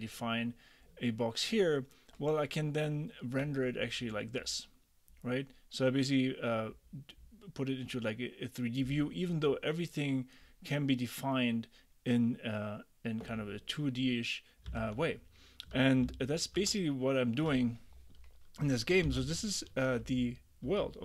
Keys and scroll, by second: 14.8 super+Tab, 19.1 ctrl+d, 20.1 ctrl+u.